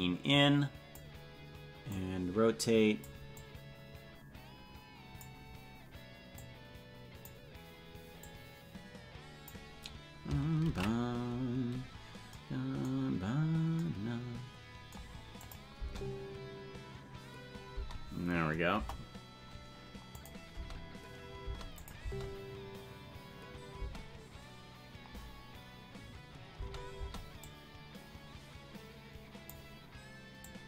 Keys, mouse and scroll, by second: 1.8-3.0 drag, 3.3-5.2 drag, 6.3 click, 8.1-9.5 drag, 13.3 ctrl+s, 15.4 click, 15.7 space, 18.7 space, 18.7 KP_0, 20.2 click, 20.5 space, 21.8 click, 22.0 space, 23.8 space, 27.4-29.5 drag, 27.4 space, 30.4 click.